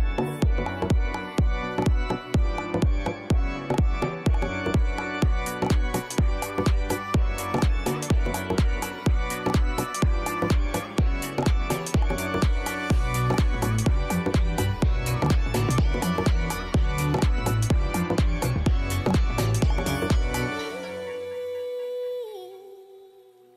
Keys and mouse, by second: 3.1 right click, 5.0 right click, 6.9 click, 18.8 KP_9, 19.1 Return.